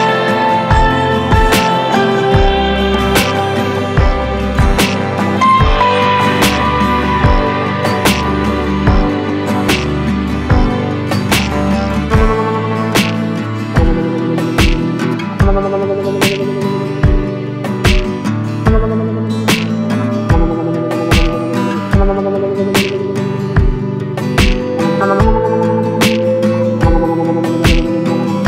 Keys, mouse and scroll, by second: 0.3 click, 1.4 Delete, 1.9 a, 2.3 e, 2.9 Tab, 3.4 s, 4.2 ctrl+c, 4.3 ctrl+v, 4.4 g, 5.2 click, 5.5 click, 5.7 drag, 6.0 drag, 6.1 g, 7.0 drag, 7.3 click, 7.5 Tab, 8.4-8.9 scroll up 1, 8.9 Tab, 9.7 scroll down 1, 9.9 click, 10.0 Tab, 10.6 3, 10.8 click, 11.3 shift+d, 11.6 p, 12.1 Tab, 12.3 click, 12.6 click, 12.9 g, 13.7-14.2 right drag, 14.2 s, 15.1 scroll up 1, 15.2-17.7 typing, 15.7 Tab, 19.0 3, 19.0 click, 19.2 g, 22.4 Tab, 23.6-25.1 drag, 25.1 s, 25.9 click, 26.4 Tab, 26.7 g, 27.5 Tab, 28.0 Tab.